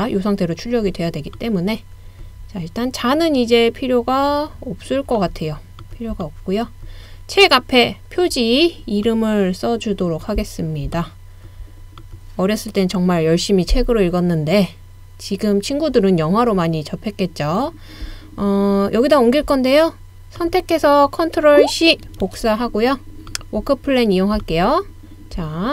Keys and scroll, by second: 22.2 super+c.